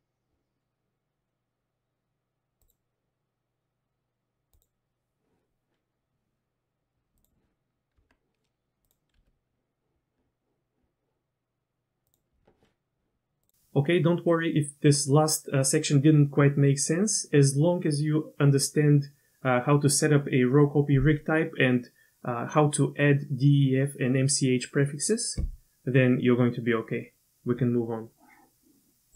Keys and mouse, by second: 2.6 click, 4.6 click, 8.0 Tab, 9.2 r.